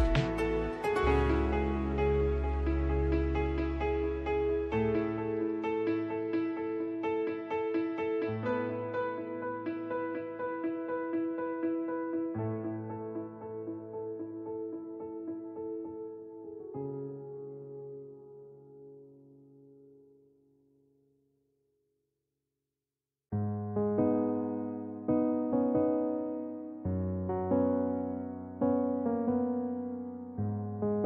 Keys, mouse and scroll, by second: 2.0-3.5 right drag, 3.0 Tab, 5.5 Tab, 8.2 shift+Left, 13.5-15.1 right drag, 14.4 shift+s, 17.8-19.2 right drag, 18.6 Tab, 20.6 shift+s, 24.5 ctrl+h, 27.5 middle click, 28.6 Home, 30.9 Tab.